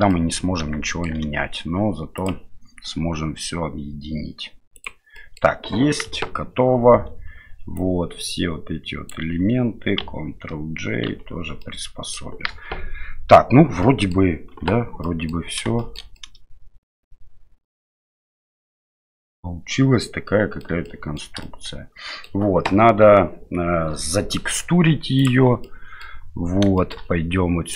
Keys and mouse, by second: 0.1 middle drag, 0.9 shift+middle drag, 2.1-4.9 drag, 5.1 middle click, 6.0 KP_1, 7.9-9.1 drag, 11.1 ctrl+j, 11.6-12.1 middle drag, 12.5 KP_1, 13.8-14.1 middle drag, 14.5 KP_Divide, 15.0 middle drag, 15.8 shift+middle drag, 16.1-20.6 middle drag, 20.8-21.2 shift+middle drag, 21.4-22.2 middle drag, 25.2 click, 25.6 middle click, 26.7 shift+middle click.